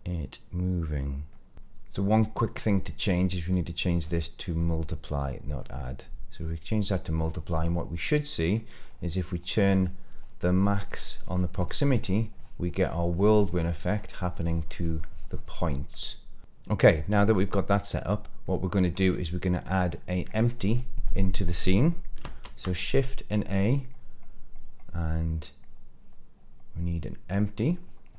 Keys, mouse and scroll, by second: 1.5 click, 3.4-4.0 drag, 4.4-5.7 drag, 6.6 middle click, 8.4-15.9 drag, 16.4 click, 17.7 middle click, 18.6-18.9 scroll down 2, 18.9 middle click, 19.5 scroll down 2, 19.8 middle click, 21.0 click, 22.1 shift+a.